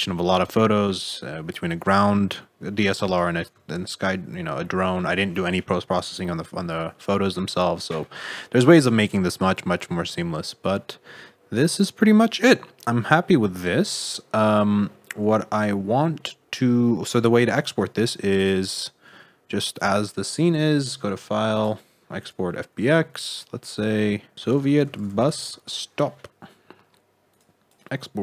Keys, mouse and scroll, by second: 0.7 middle click, 2.3 middle click, 3.6 shift+middle click, 4.6 middle click, 5.1 shift+middle click, 13.8-14.9 scroll down 8, 14.9 middle click, 16.5-17.1 scroll up 4, 17.1 shift+middle click, 17.8 scroll up 1, 18.3 click, 20.7 click.